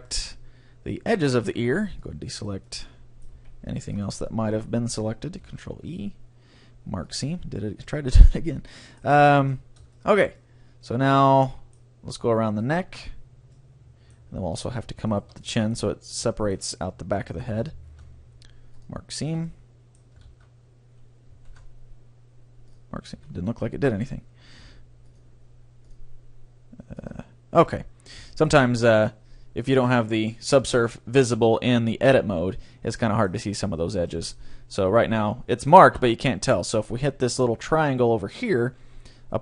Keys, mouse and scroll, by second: 1.2 middle click, 1.4 c, 2.4 right click, 2.6-3.8 drag, 3.3 right click, 3.3 c, 4.2 middle click, 5.4 ctrl+e, 8.3 a, 10.2-12.0 middle drag, 12.5-13.8 right drag, 13.6-15.3 middle drag, 13.9 right click, 14.8-16.8 right drag, 15.4-18.0 middle drag, 17.8 ctrl+e, 19.2 a, 19.5-21.2 middle drag, 20.3 ctrl+z, 21.6 ctrl+e, 23.2 a, 23.5 middle click, 25.1-28.8 drag, 27.8-30.8 middle drag, 30.2-31.8 drag, 33.1-36.0 middle drag.